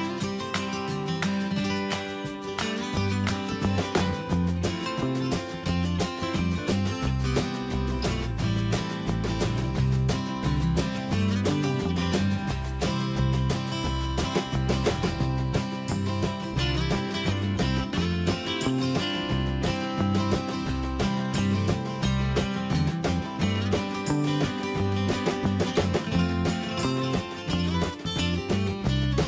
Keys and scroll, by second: 6.1 ctrl+z, 26.5 ctrl+t.